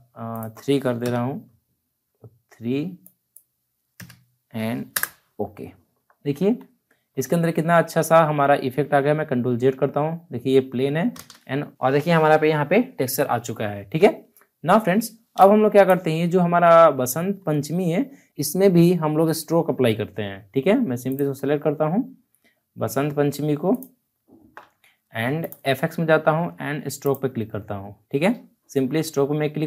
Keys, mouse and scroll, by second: 3.0 click, 4.9 Return, 6.1-7.2 alt+scroll up 4, 8.0 scroll down 1, 9.4 ctrl+z, 11.1 shift+z, 11.7 ctrl+shift+z, 13.6 alt+scroll down 1, 14.7-15.3 scroll down 1, 15.3 space, 15.4 click, 15.8 space, 20.8 space, 21.0 ctrl+click.